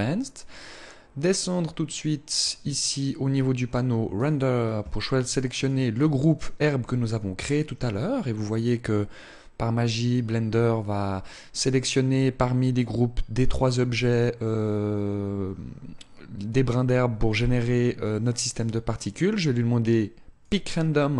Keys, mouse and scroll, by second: 3.8 click, 5.2 click, 20.1 click.